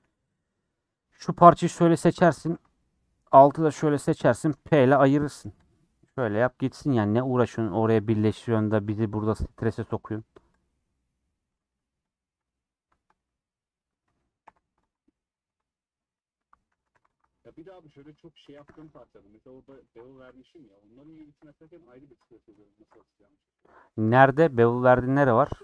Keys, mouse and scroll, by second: 0.6 1, 0.7 3, 1.0 alt+Left, 1.4 scroll down 5, 1.9 shift+middle click, 2.5 alt+z, 2.8-4.1 middle drag, 4.1 shift+click, 5.3 p, 5.4 Tab, 5.6 click, 5.8 scroll down 2, 5.9 middle click, 6.2 alt+z, 6.7 click, 6.8 g, 8.9-10.6 middle drag, 10.6 click, 10.8 middle click, 11.5 click, 12.1 click, 12.4 click, 12.7 middle click, 12.9 scroll down 2, 13.4 middle click, 14.0-14.4 scroll up 1, 14.4 h, 14.9 click, 15.4 Tab, 15.5 middle click, 15.7 scroll up 3, 16.1 middle click, 16.8 2, 17.8-18.9 middle drag, 19.5 middle click, 19.7 ctrl+z, 21.2 alt+click, 23.5 scroll down 2, 24.7 scroll down 3, 24.8 scroll up 2, 25.3 scroll down 2, 25.4 middle click.